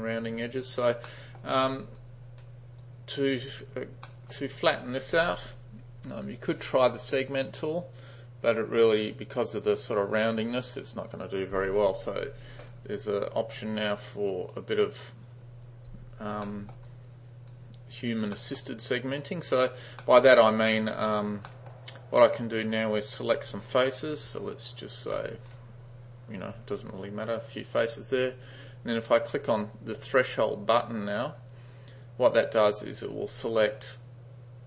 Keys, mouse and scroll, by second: 1.1-1.5 middle drag, 1.8 click, 2.9-3.3 drag, 4.1 middle drag, 4.7 click, 11.7-12.8 drag, 14.5 click, 16.5 middle drag, 16.9-17.6 drag, 18.4 middle drag, 18.8-19.3 drag, 20.1 middle click, 20.4 click, 21.5 middle click, 24.3 g, 33.0 click.